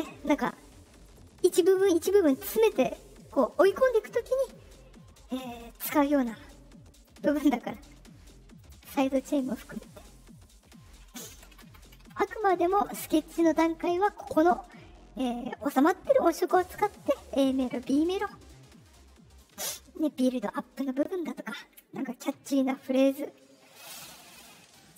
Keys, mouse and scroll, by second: 6.9 click, 7.5 click, 8.5 click, 9.1 click, 13.1 Left.